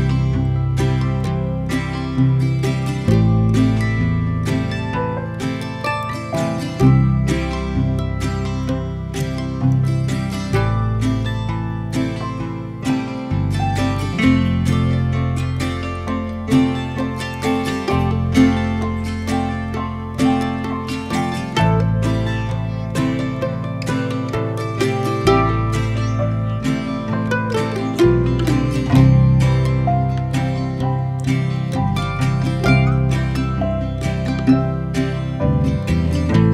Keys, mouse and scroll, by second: 0.3 Tab, 0.6-2.0 middle drag, 2.0 3, 3.1 click, 3.8-6.2 middle drag, 6.2 shift+d, 10.6 p, 11.1 middle click, 11.8 Tab, 12.3 click, 12.8 click, 13.8-14.4 middle drag, 14.6 Tab, 17.5 ctrl+r, 28.8-31.4 middle drag, 31.4 ctrl+b.